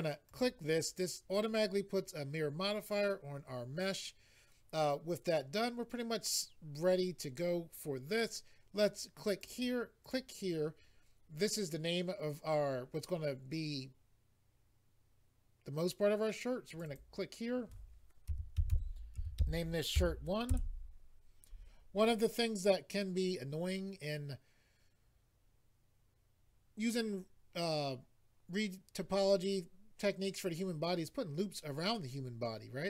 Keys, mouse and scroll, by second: 0.3 click, 9.4 click, 10.0 click, 16.7 click, 16.9 double click, 18.3-20.0 typing, 20.5 Return.